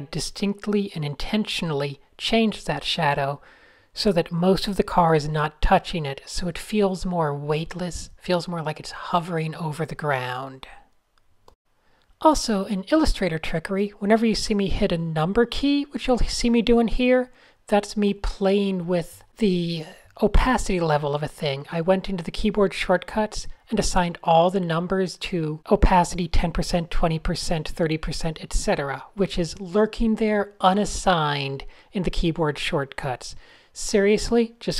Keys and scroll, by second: 1.5 shift+super+a, 3.9 super+h, 4.9 alt+shift+super++, 5.8 alt+super+g, 7.4 g, 9.9 8, 10.7 6, 12.0 super+z, 12.0 super+z, 12.1 super+z, 12.2 super+z, 12.3 super+z, 13.5 super+z, 13.8 a, 14.9 super+g, 16.0 super+z, 16.1 super+z, 16.8 fn+F1, 17.4 super+h, 18.4 shift+super+a, 18.8 shift+super+g, 20.0 fn+F1, 21.0 8, 21.2 alt+super+h, 21.3 alt+super+g, 22.1 shift+super+a, 22.2 n, 23.2 super+z, 23.3 super+z, 23.3 Tab, 23.9 super+z, 25.4 super+z, 25.4 super+z, 27.8 super+z, 28.1 super+z, 28.8 a, 29.5 n, 29.9 super+z, 30.0 super+a, 30.3 super+n, 31.1 super+z, 31.4 shift+super+a, 31.7 super+0, 32.2 Tab, 33.2 super+0, 33.4 Tab.